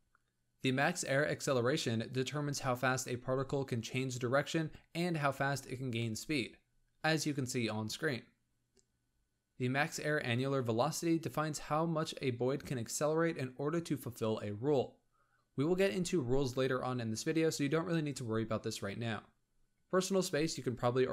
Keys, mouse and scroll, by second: 0.0 click, 0.2 shift+middle click, 0.8 click, 1.4 shift+click, 2.3 shift+middle drag, 2.5 scroll down 2, 2.9-3.6 scroll up 1, 3.6 Tab, 3.9 Tab, 4.3 space, 5.5 g, 9.6-10.1 scroll up 5, 10.1-18.3 shift+middle drag, 19.6-20.0 scroll down 8, 20.0 space.